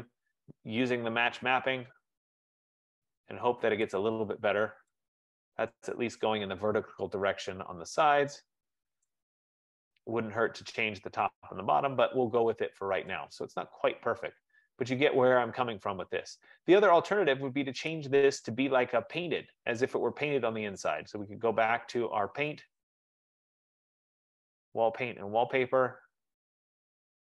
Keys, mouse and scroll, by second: 2.6 click, 4.2 click, 5.1 click, 6.4-7.1 scroll, 8.0 scroll, 8.9 F15, 9.2 right click, 9.7-10.1 scroll, 10.5-11.1 scroll, 12.3-13.0 scroll, 13.0-13.3 scroll, 17.1 right click, 18.1 click, 21.4 click, 24.3 click, 25.9-27.1 scroll.